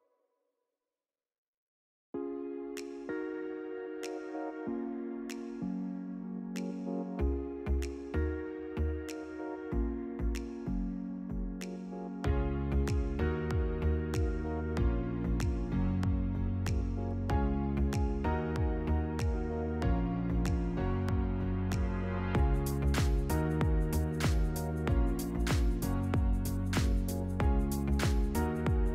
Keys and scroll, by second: 5.6 shift+t, 6.0 o, 7.0 a, 7.4 o, 11.0 0, 13.0 9, 15.2 Delete, 17.7 Tab.